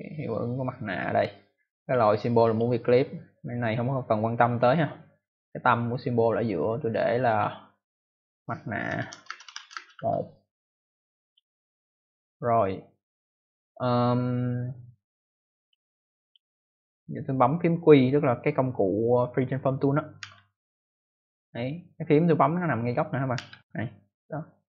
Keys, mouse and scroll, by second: 1.7 click, 2.4 click, 4.4 click, 6.5 click, 8.6-10.4 typing, 11.1 click, 15.5 click, 16.1 click, 20.1 q, 23.3 q.